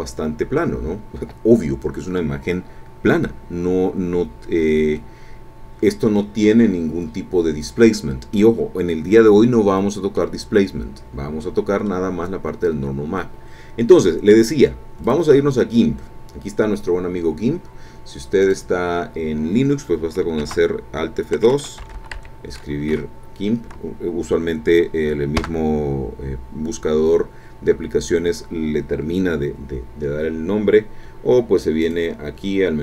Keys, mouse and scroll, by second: 5.0-6.3 middle drag, 6.6-8.0 middle drag, 9.4 scroll down 1, 9.7 middle click, 10.7-11.3 scroll up 1, 11.4 middle click, 11.9 scroll up 1, 12.8 scroll down 1, 15.0 click, 18.5 click, 20.4 alt+F2, 21.8 g, 22.0 i, 22.2 m, 23.0 Right, 25.4 KP_Enter, 31.8 click.